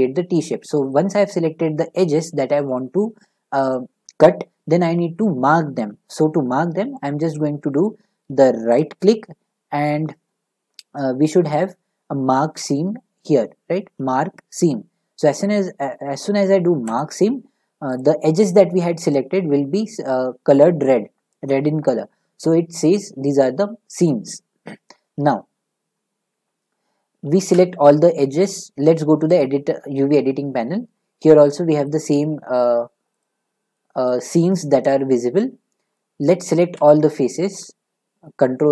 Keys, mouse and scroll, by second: 0.4 middle click, 8.8-12.1 right drag, 17.0 click, 18.0 click, 23.0 middle click, 24.7 middle click, 27.5 a, 29.4 click, 31.0-33.2 middle drag, 33.2 click, 36.0 middle click, 37.0-38.7 middle drag, 37.0 a.